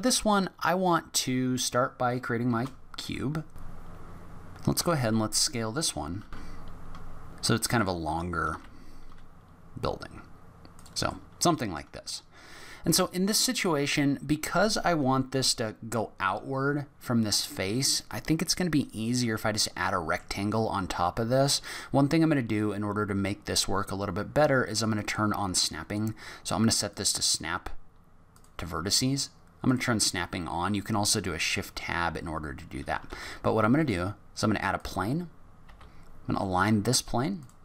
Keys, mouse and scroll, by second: 2.5 shift+a, 3.7 g, 3.9 s, 4.1 click, 4.2 g, 4.4 middle click, 4.5 scroll up 1, 4.7 s, 8.3 s, 11.1 middle click, 19.1-19.5 scroll up 3, 19.5 middle click, 24.9 click, 29.6 click, 31.4 scroll down 4, 32.3-32.7 scroll up 1, 33.1 shift+a, 35.6 g.